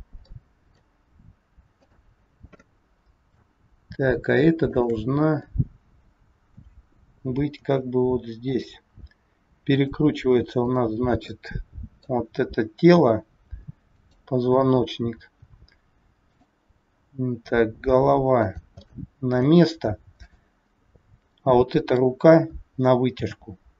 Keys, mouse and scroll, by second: 0.3 middle click, 1.7 click, 2.5 middle click, 4.5 shift+click, 5.4 middle click, 7.5 g, 9.6 click, 10.5 click, 11.2 middle click, 12.9 r, 14.8-15.1 scroll up 2, 15.9 scroll up 1, 16.3 click, 16.9 r, 18.7 scroll up 1, 18.9 middle click, 20.2 click, 20.8 scroll down 3, 21.4 middle click, 22.6 scroll down 1, 23.2 g.